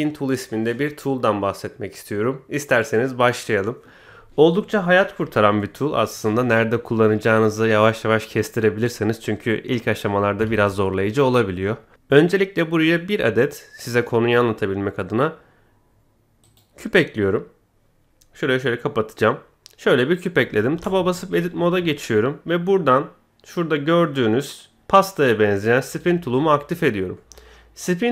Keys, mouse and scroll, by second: 10.5 shift+a, 17.5-17.8 scroll up 1, 18.5 click, 19.2-20.5 middle drag, 20.7 Tab, 25.8 click, 27.1-28.1 middle drag.